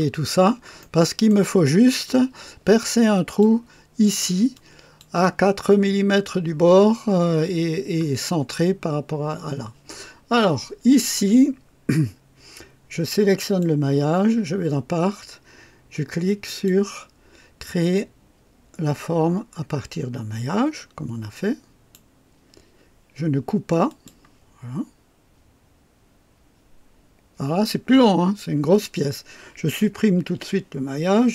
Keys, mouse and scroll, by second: 0.0-0.3 scroll up 2, 0.7-1.4 right drag, 2.0-3.6 drag, 4.5-5.1 drag, 13.4 click, 16.4 click, 21.3 click, 23.8 click, 30.3 Delete.